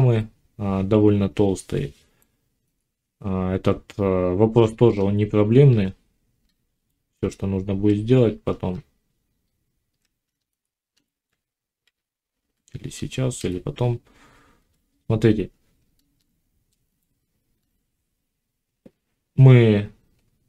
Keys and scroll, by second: 5.8 z, 7.1 Tab, 11.8 z.